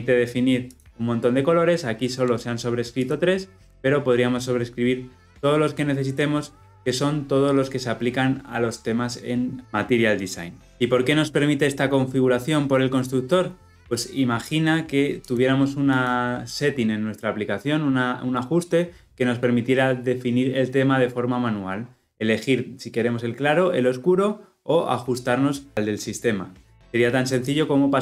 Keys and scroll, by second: 3.2 ctrl+b, 10.7 ctrl+alt+Left.